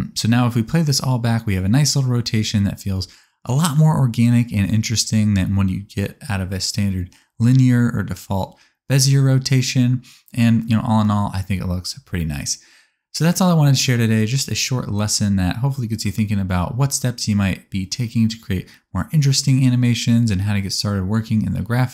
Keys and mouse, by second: 3.3 click, 3.5 click, 3.6-5.4 middle drag, 4.5 s, 10.4 alt+a, 13.3 shift+drag, 14.3 n, 15.2 click, 16.2 a, 18.2-20.3 ctrl+drag, 20.9-21.9 shift+drag.